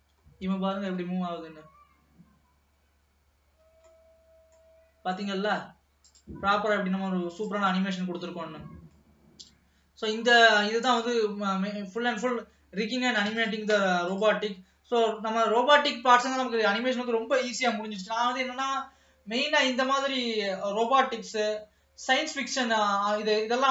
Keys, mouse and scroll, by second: 0.3-0.9 scroll up 1, 0.9 alt+a, 4.1-6.3 middle drag, 6.3 click, 7.3 click, 9.1-10.4 middle drag, 10.4-11.3 scroll down 1, 11.3-12.0 scroll down 1, 12.0-13.4 scroll down 1, 14.8-17.3 scroll up 2, 17.3-17.8 scroll up 1.